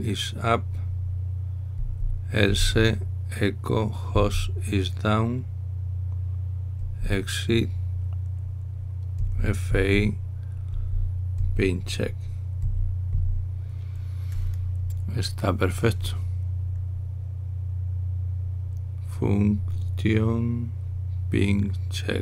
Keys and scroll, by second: 2.5 Down, 3.2 typing, 4.8 Down, 4.8 Right, 7.7 Down, 10.0-12.1 typing, 13.4-13.8 typing.